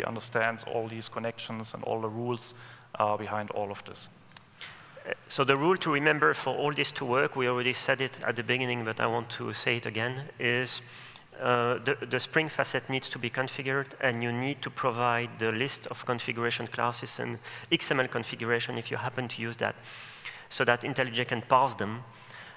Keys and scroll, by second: 8.5 super+w, 13.4 super+o.